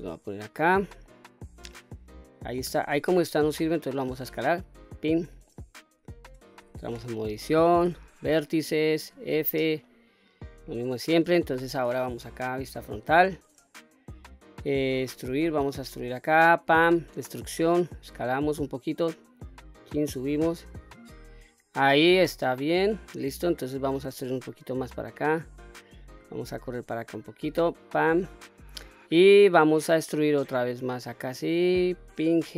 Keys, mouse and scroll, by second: 0.0 scroll up 1, 0.1-0.7 middle drag, 1.0 middle click, 2.7 s, 5.0 click, 5.5 middle click, 6.6 Tab, 7.8 1, 9.0 f, 9.9 middle click, 12.6 KP_1, 13.3-13.9 scroll up 2, 15.1 e, 16.9 click, 17.8 s, 19.3 click, 20.1-21.4 drag, 22.0-22.5 scroll down 2, 22.5 shift+middle click, 24.0 e, 25.5 click, 26.5 g, 28.0 click, 30.2 e, 32.1 click, 32.4 g.